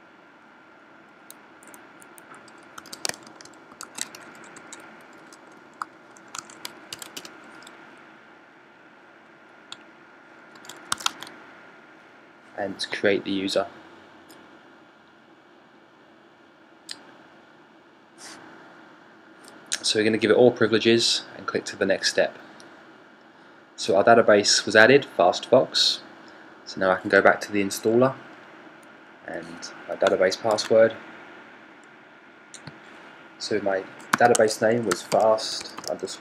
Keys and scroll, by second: 2.5-7.0 typing, 6.2 super+a, 6.8 super+c, 33.7-36.2 typing.